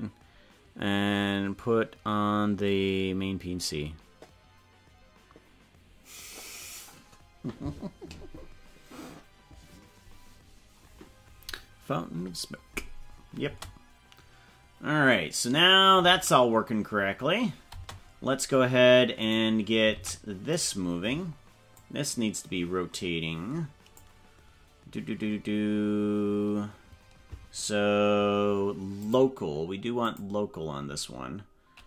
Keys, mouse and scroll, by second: 13.4 space, 17.7 space, 19.2 right click, 19.9 ctrl+Tab, 20.5 right click, 21.7-24.0 drag, 24.8-25.4 scroll up 4, 25.5 scroll down 3, 29.0-30.4 drag.